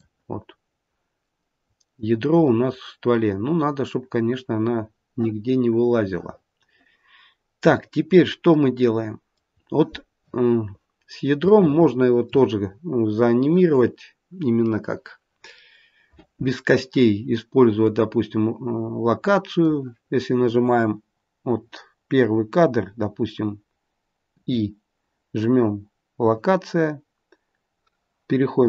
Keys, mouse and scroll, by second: 0.3-0.9 scroll up 2, 0.9 scroll down 1, 1.1 middle click, 1.3 middle click, 2.4 middle click, 2.6 middle click, 7.9-8.5 scroll down 3, 8.5 middle click, 10.6-11.0 scroll down 1, 11.4 shift+middle click, 17.7 click, 21.6-23.8 scroll down 1, 24.2 i, 28.5 click.